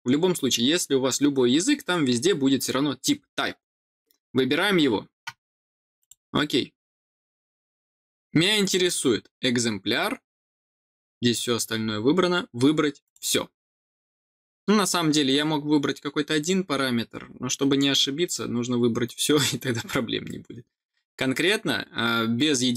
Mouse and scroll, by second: 5.9 click, 11.8 middle click, 13.0 click.